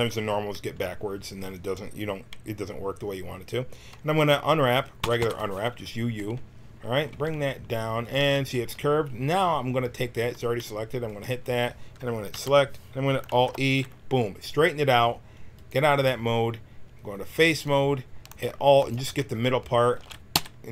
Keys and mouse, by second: 5.0 u, 5.2 u, 7.1 g, 11.0-13.3 drag, 12.3 l, 13.3 alt+e, 15.5-20.7 drag, 19.9 x, 20.3 f.